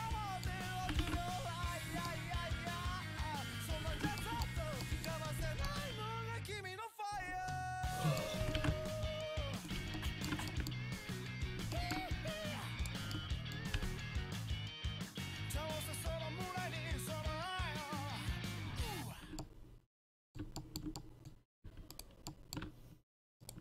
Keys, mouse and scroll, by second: 0.1 right click, 0.3 click, 0.3 right click, 0.6 middle click, 0.9 r, 1.9 click, 2.2-3.6 middle drag, 3.9 a, 5.5 l, 8.5 r, 9.8 a, 11.4-13.8 right drag, 13.8 g, 19.2 click, 21.0 middle click, 21.7 a, 22.0-23.6 right drag.